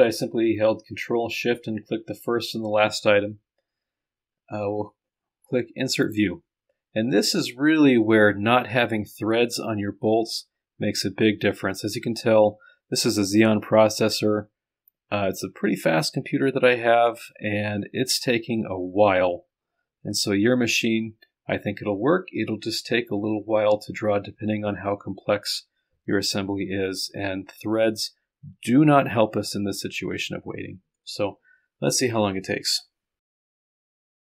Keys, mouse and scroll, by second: 33.6 click.